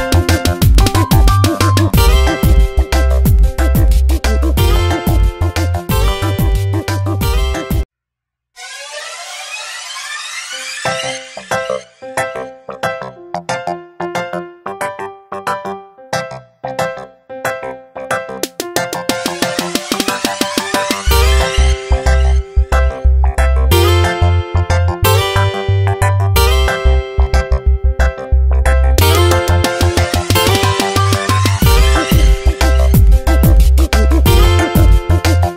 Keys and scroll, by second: 0.9 ctrl+z, 16.6 ctrl+j, 17.3 v, 20.4 Tab, 25.6 space, 28.1 Tab, 32.2 ctrl+z.